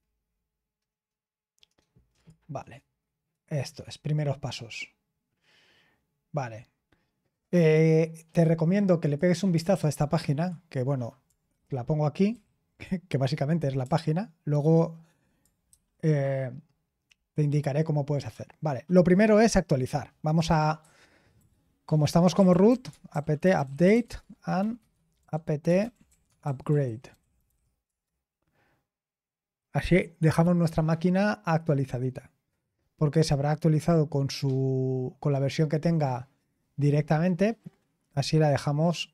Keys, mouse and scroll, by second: 0.4-1.0 scroll up 2, 1.0-2.1 scroll up 1, 2.1 click, 3.8-4.5 scroll down 1, 4.5-5.5 scroll down 1, 5.5-9.0 scroll down 1, 9.0 click, 9.7 ctrl+c, 10.3 click, 12.3 ctrl+v, 13.8 BackSpace, 14.4-15.2 BackSpace, 15.7 ctrl+c, 17.9-20.5 scroll down 1, 20.8 typing, 22.1-27.9 typing, 29.5 typing.